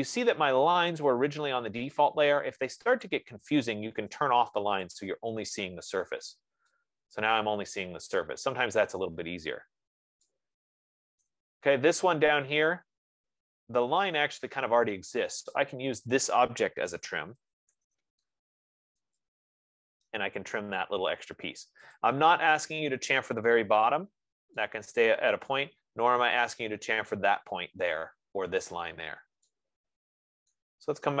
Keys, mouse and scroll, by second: 3.5 click, 5.5 click, 6.1-6.7 scroll, 8.7 right click, 9.1-9.9 scroll, 10.1-10.5 scroll, 11.7 right click, 12.3-12.9 scroll, 16.1 click, 17.2 F15, 17.6-18.7 typing, 19.5 click, 21.1 Escape, 21.8-22.1 scroll, 22.4 click, 24.7-25.0 scroll, 26.3 right click.